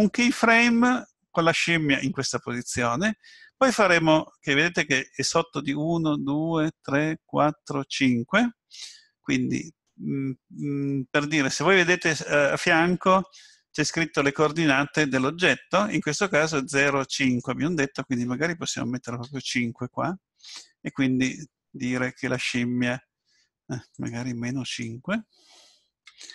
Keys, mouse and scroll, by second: 17.3 click, 24.7 click.